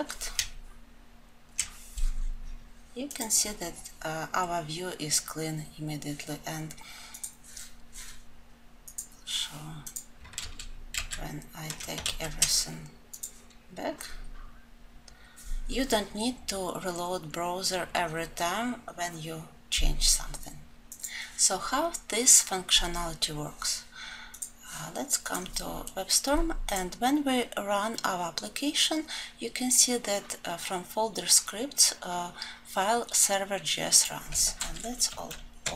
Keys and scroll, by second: 10.3 ctrl+z, 35.4 alt+F12.